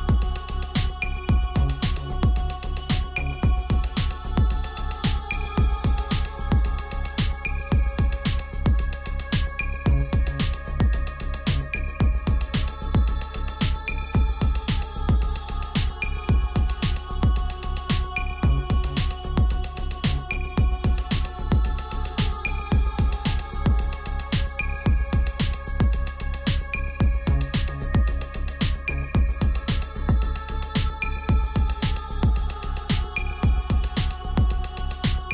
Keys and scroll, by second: 20.9 ctrl+=, 31.3 shift+Left.